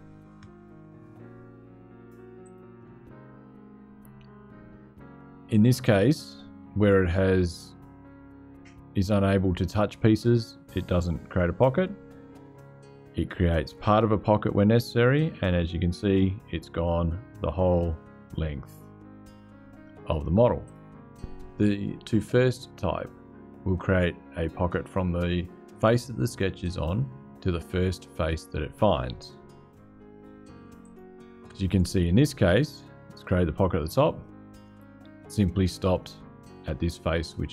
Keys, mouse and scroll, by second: 2.1 click, 7.8-9.5 drag, 11.6-13.5 drag, 14.8-19.4 drag, 20.4 click, 30.6 click, 33.9-34.9 scroll up 2, 34.9 click.